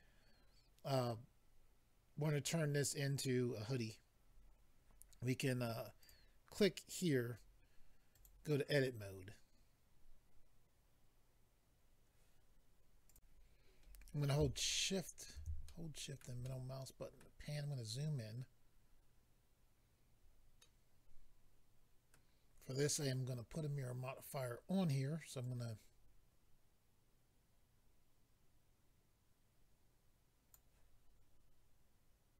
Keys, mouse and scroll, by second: 6.0 click, 6.1 click, 8.1 click, 8.2 click, 13.1 click, 13.1 click, 14.7 shift+middle click, 15.6 shift+middle click, 16.4 middle click, 17.5-18.5 scroll up 4, 20.6 middle click, 25.4 click.